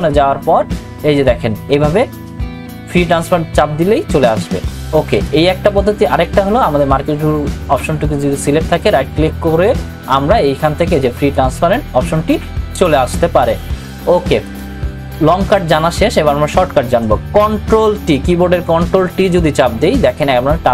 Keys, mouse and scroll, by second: 3.1 click, 8.9 right click, 11.3 click, 14.5 click, 19.1 click, 19.1 ctrl+t.